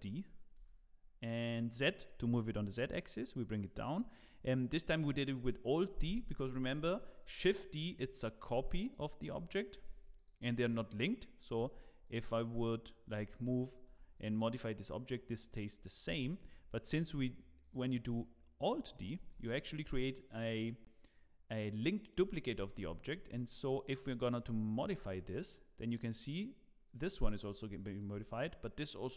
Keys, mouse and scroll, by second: 4.5 click, 6.5 scroll up 3, 6.8 shift+middle click, 7.9 click, 8.8 click, 9.7 shift+d, 11.6 Tab, 12.0 click, 13.2 g, 13.9 Tab, 16.1 x, 16.9 click, 17.6 click, 19.2 alt+d, 22.7 Tab, 23.1 click, 24.8 g, 27.4 scroll down 4, 27.7 shift+middle click.